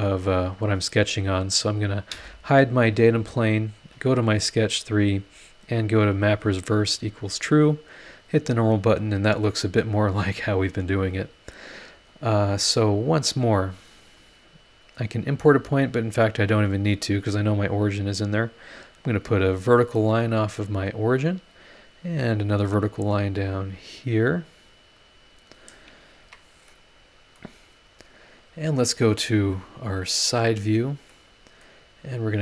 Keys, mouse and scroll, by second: 0.3 click, 1.8 click, 2.1 space, 2.8 scroll down 2, 4.0 click, 5.5 click, 5.9 click, 6.4 click, 8.0 click, 8.9-9.2 scroll up 2, 11.5 click, 13.5 click, 16.9 click, 18.9 click, 20.6 click, 22.4 click, 25.4 click, 25.6-27.5 middle drag, 26.2 Escape, 26.8 click, 26.8 right click, 30.0 click, 30.6 scroll down 1, 31.1 middle click, 31.2 click, 31.2 right click.